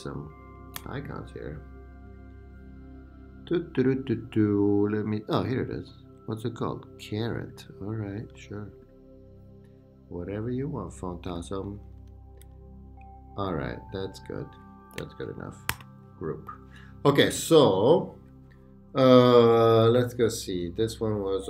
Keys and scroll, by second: 11.7 Left, 15.7 super+g.